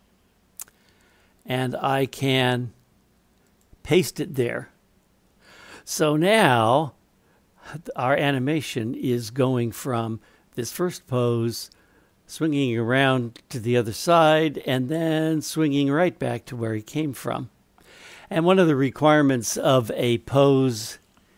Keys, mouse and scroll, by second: 1.7-3.6 right drag, 6.3-18.2 drag.